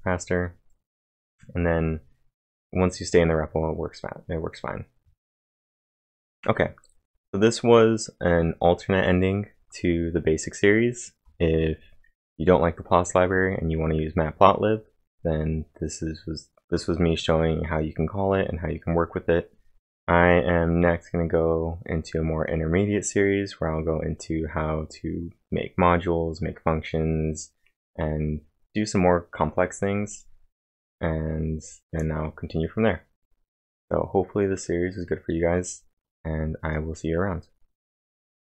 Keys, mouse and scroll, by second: 1.4-2.1 typing.